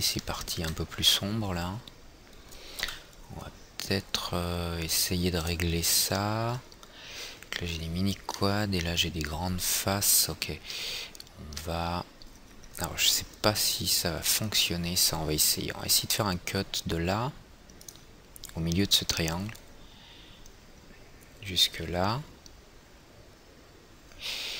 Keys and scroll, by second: 3.5 F4, 16.4 alt+c.